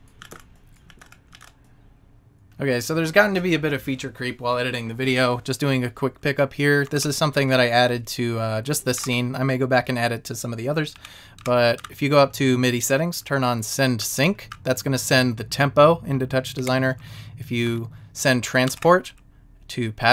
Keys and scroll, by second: 0.2 Left, 0.3 Down, 0.3 Right, 0.8 Left, 0.9 Down, 1.0 Right, 1.3 Left, 1.4 Down, 1.5 Right, 9.1 shift+Up, 11.0 Down, 16.7 Down, 17.7 Left.